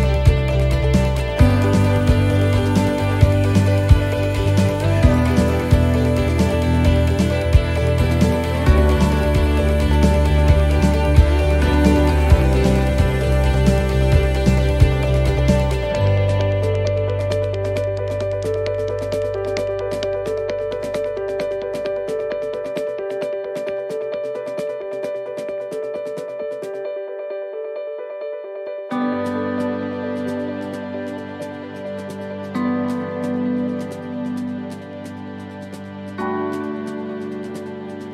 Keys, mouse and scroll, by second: 0.6 click, 1.8 right click, 3.0 middle click, 4.9 c, 9.1 middle click, 10.0 shift+right click, 10.5 shift+right click, 11.0 middle click, 12.0 middle click, 13.4 shift+right click, 15.0 shift+right click, 18.3 shift+right click, 18.4 middle click, 19.2 shift+right click, 21.4 shift+right click, 22.5 shift+right click, 22.7 middle click, 23.3 shift+middle click, 23.7-24.4 scroll up 3, 24.4 shift+right click, 25.0 shift+right click, 26.3-31.9 shift+right click, 35.8 middle click, 36.9 shift+middle click, 37.5 middle click.